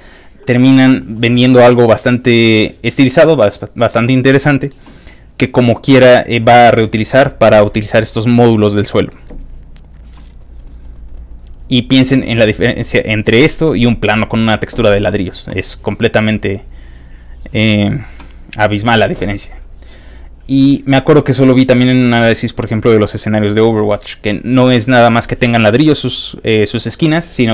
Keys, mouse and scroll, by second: 2.0-3.0 scroll down 6, 4.3 scroll down 2, 5.1-5.5 scroll down 2, 5.7 scroll down 2, 9.7 scroll up 2, 9.8 middle click, 10.7 middle click, 12.1 middle click, 12.2 scroll down 1, 12.3 middle click, 12.4 scroll up 1, 17.2 middle click, 17.5-18.6 scroll down 6, 19.2-19.7 scroll up 3, 20.6-21.0 scroll up 2, 21.0 scroll down 2, 21.2-21.6 scroll up 3.